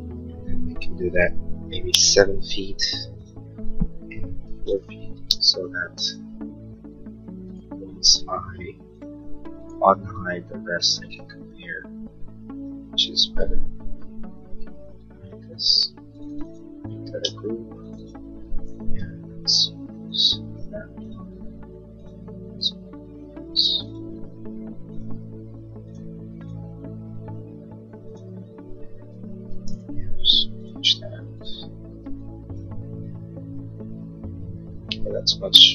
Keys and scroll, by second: 1.6-2.5 typing, 4.8 4, 5.0 Return, 5.5 space, 14.4 shift+u, 17.7 g, 19.3 l, 21.9 Escape, 30.3 p, 32.3 e.